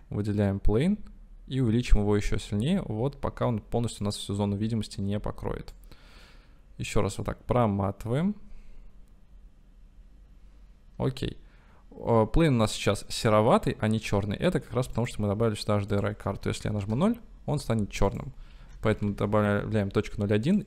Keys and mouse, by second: 1.1 s, 4.2 drag, 7.0-14.3 drag, 15.0 click, 16.0-19.5 drag.